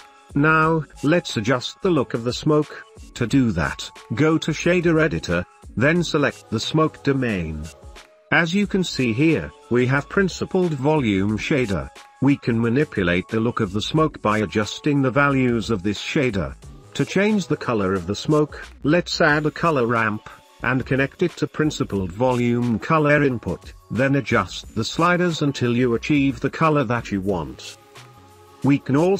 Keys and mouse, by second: 1.4 click, 7.7 click, 8.2 middle click, 8.8 middle click, 9.6-10.4 drag, 10.4 n, 10.8 middle click, 11.6 click, 12.4-13.9 drag, 14.3 click, 15.2 Delete, 16.5 click, 18.1 shift+a, 22.6-23.4 drag, 24.3 click, 26.3 click, 26.4 ctrl+s, 26.9 shift+Left, 27.0 space, 27.3-28.9 drag.